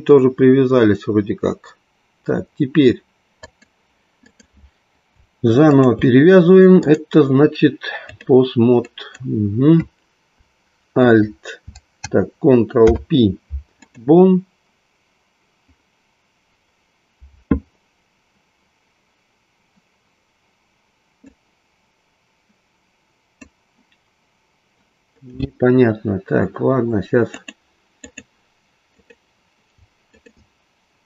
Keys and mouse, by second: 3.3 click, 4.3 click, 6.7-8.3 drag, 8.8-9.3 drag, 12.8 ctrl+p, 21.2-23.6 drag, 27.2-28.2 drag, 29.1 click, 30.2 shift+click.